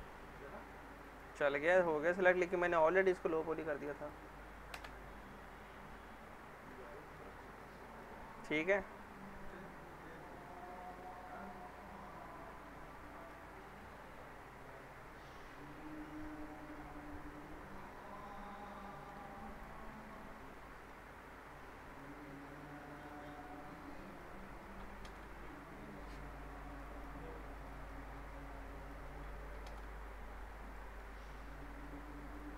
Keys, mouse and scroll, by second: 0.2 alt+middle click, 0.9 click, 3.6 ctrl+click, 4.7 ctrl+BackSpace, 5.7-6.9 alt+middle drag, 8.8-9.7 alt+middle drag, 13.2 click, 16.3 scroll down 1, 17.7 click, 18.8 alt+middle click, 19.5 click, 19.9 middle click, 20.3 scroll up 1, 20.5-21.2 middle drag, 21.9 click, 22.6-23.0 scroll up 1, 23.0 click, 25.1 ctrl+BackSpace, 26.7 click, 29.6 ctrl+BackSpace, 30.3 scroll down 1, 30.7 middle click, 31.1 scroll up 1, 32.3 click.